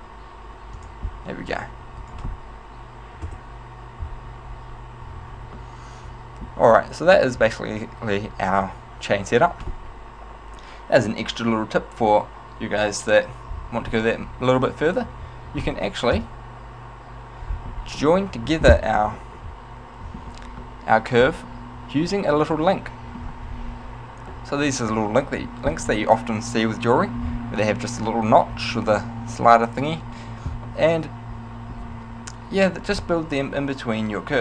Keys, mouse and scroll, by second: 0.9 click, 2.5 right click, 3.5 KP_0, 4.9-5.4 scroll up 1, 5.8 shift+middle click, 7.0 shift+middle click, 15.2 right click, 16.3 KP_Decimal, 18.1 middle click, 18.9 z, 19.5 middle click, 20.8 middle click, 22.6 middle click, 23.3-24.4 scroll down 4, 24.6 middle click, 30.9 middle click.